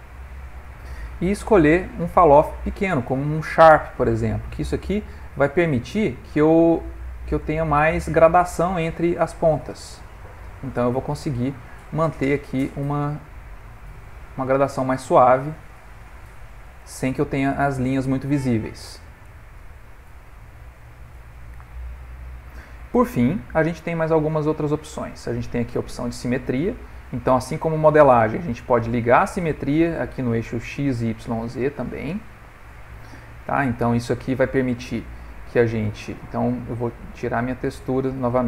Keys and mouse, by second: 1.7 click, 5.9 f, 8.3 click, 8.8 click, 9.0 click, 9.2 click, 9.4 click, 9.5 click, 9.9 right click, 11.3 right click, 12.1 middle click, 12.3 middle click, 13.6 click, 13.9 click, 14.1 click, 14.3 click, 14.4 click, 14.6 click, 14.9 right click, 15.4 right click, 15.6 click, 15.7 click, 16.0 click, 16.2 click, 16.3 click, 16.4 click, 16.6 click, 16.7-17.2 click, 16.9 click, 17.1 click, 17.6 click, 17.9 right click, 19.1 click, 19.4 click, 20.5 click, 20.7 right click, 22.3 middle click, 23.9 middle click, 25.9 click, 26.8 click, 29.6 middle click, 33.9 middle click, 34.2 middle click, 35.7 ctrl+middle click, 35.7 ctrl+middle click, 37.5 click.